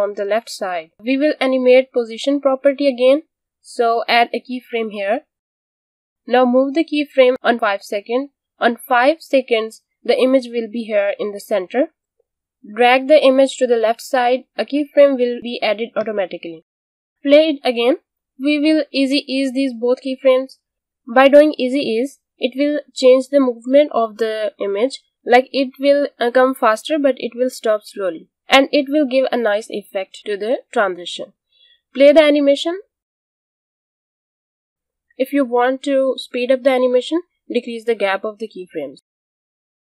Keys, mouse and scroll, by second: 2.0 p, 5.8 click, 12.6 click, 17.3 space, 19.7 click, 21.0 right click, 23.2 click, 28.5 space, 29.7 click, 31.4 space, 36.9 space, 37.1 click, 37.8 u, 38.0 click.